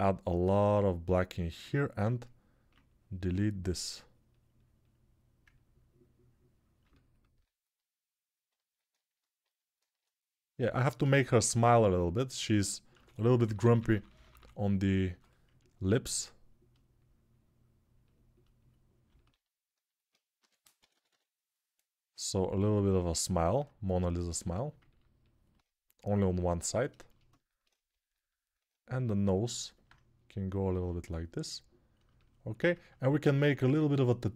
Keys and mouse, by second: 6.9-13.4 ctrl+alt+drag, 10.4 alt+q, 12.7-14.8 typing, 19.1-27.7 alt+drag, 20.2 g, 20.6 ], 20.7 ], 20.9 ], 27.7-31.9 ctrl+alt+right drag, 31.9-34.3 alt+shift+drag.